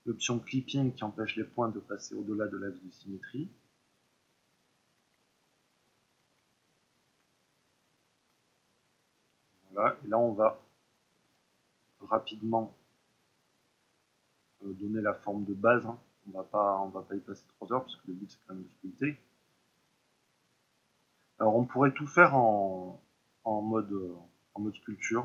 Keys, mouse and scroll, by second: 3.9-10.5 middle drag, 10.5-11.7 drag, 11.7 middle click, 12.6 click, 13.5 middle click, 14.4 click, 14.8 middle click, 15.3 click, 16.1-18.5 middle drag, 18.5-20.0 drag, 20.0-21.4 middle drag, 21.4 ctrl+r, 22.4 click.